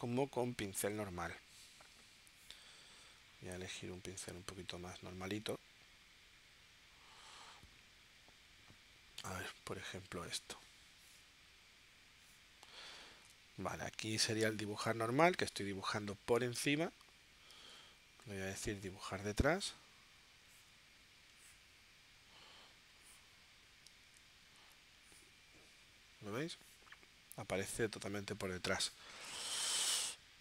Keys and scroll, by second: 13.0 super+z, 17.5 super+z, 25.0 super+z, 29.7 v.